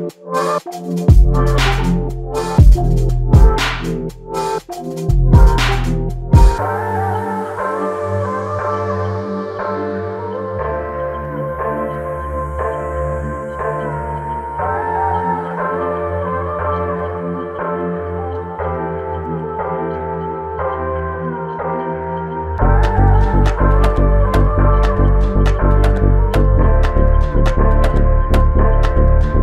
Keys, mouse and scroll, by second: 2.9 alt+click, 19.6 shift+click, 23.0 alt+click.